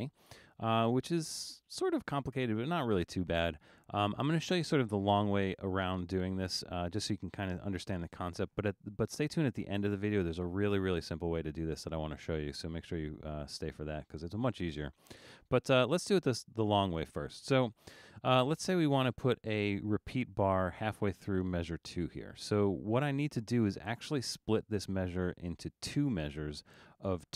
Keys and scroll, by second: 0.3 super+=.